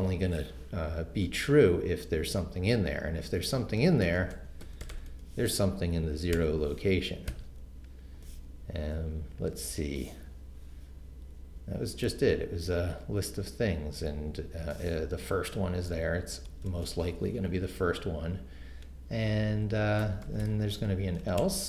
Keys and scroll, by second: 3.8-7.3 typing, 12.1 Right, 16.5 Return, 19.4-21.6 typing.